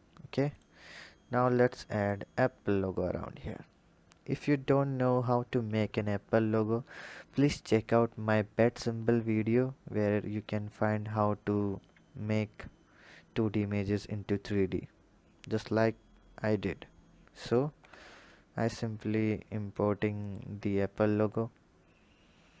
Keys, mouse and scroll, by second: 0.4 click, 1.4-4.4 drag, 17.5 KP_7, 19.5-22.5 drag.